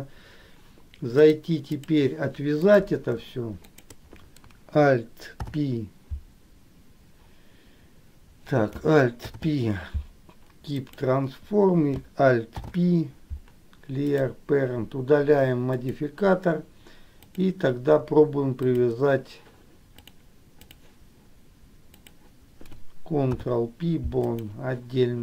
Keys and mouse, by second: 1.4 click, 3.7 shift+click, 5.5 ctrl+p, 9.4 alt+p, 12.7 alt+p, 15.9 click, 17.4 click, 18.9 shift+click, 20.2 click, 23.4 ctrl+p.